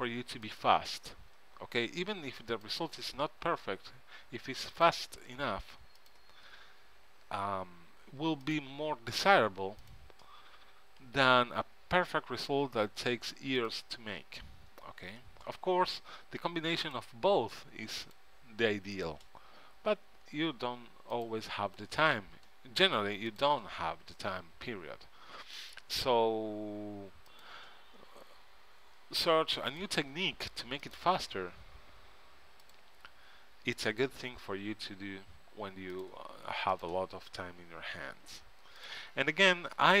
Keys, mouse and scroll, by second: 3.6 f, 7.2 f, 10.5-15.7 drag, 11.2 f, 15.7-16.9 middle drag, 17.0-40.0 drag, 20.0 f, 24.7 f, 28.5 f, 31.9 f, 34.9 f, 38.1 f.